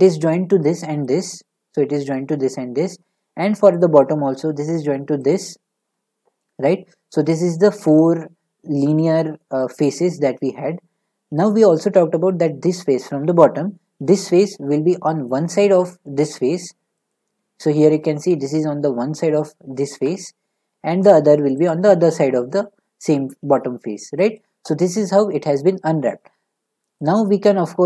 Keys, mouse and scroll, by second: 3.7-4.1 scroll, 4.2-5.3 middle drag, 5.3-8.9 shift+drag, 11.5-17.1 middle drag, 17.1-21.2 shift+drag, 21.2 middle click, 21.7-25.1 shift+drag, 27.0-27.6 drag, 27.6 middle click.